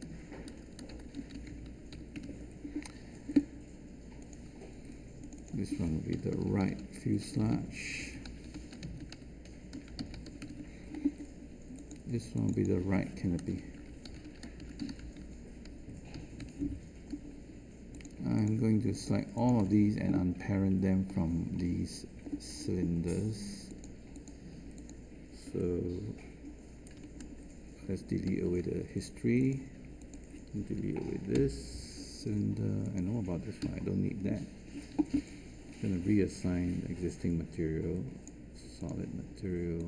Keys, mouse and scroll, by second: 0.0-1.1 typing, 2.1 Return, 7.2-9.5 typing, 10.4 Return, 13.4-14.6 typing, 16.3 Return, 28.2 alt+shift+d, 31.3 Delete.